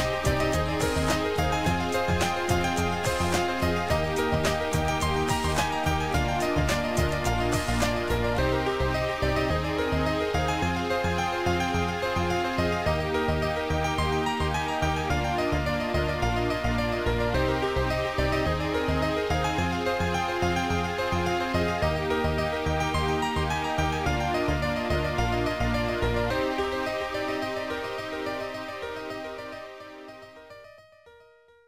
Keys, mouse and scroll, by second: 2.9 click, 5.1 shift+click, 13.9 click, 17.5 click, 21.4 click, 23.9 click, 25.6 click, 27.1 right click, 29.8 click, 31.0 shift+click.